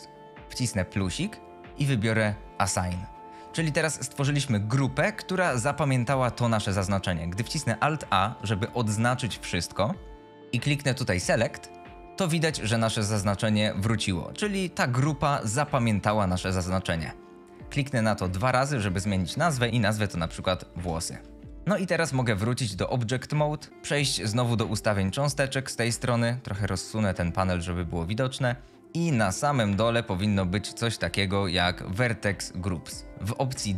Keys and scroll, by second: 8.3 alt+a, 20.0-21.7 typing.